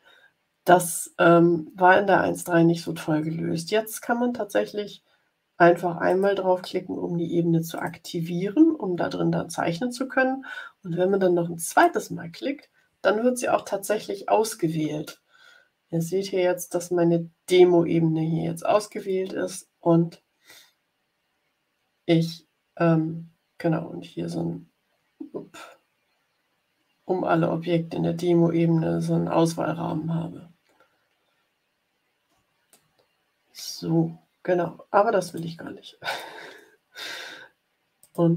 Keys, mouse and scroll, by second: 6.0 click, 7.7 click, 11.6 click, 23.7-24.2 ctrl+scroll down 2, 24.8 ctrl+scroll down 2, 26.1 ctrl+scroll down 2, 28.4 ctrl+scroll up 2, 29.2-30.3 ctrl+scroll up 6, 30.8-31.5 ctrl+scroll up 4, 31.8 ctrl+scroll up 2, 32.6 click, 33.1 middle click, 35.2 click, 36.0 click, 37.9 click.